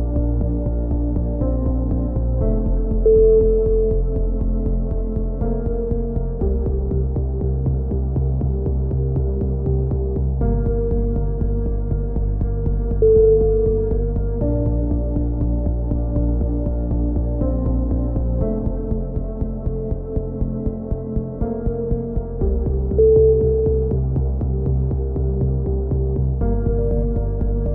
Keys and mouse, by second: 0.6-1.7 middle drag, 0.6 a, 1.7 click, 2.1-3.5 right drag, 3.2 x, 4.4 z, 4.5-6.1 middle drag, 5.1 z, 7.8 ctrl+r, 9.3 click, 9.5 right click, 10.9 click, 12.0-13.6 middle drag, 13.6 k, 20.1-21.1 right drag, 22.1 a, 22.6-23.9 middle drag, 23.6 ctrl+z, 23.9 click, 24.1 ctrl+z, 24.3 ctrl+z, 25.8 k.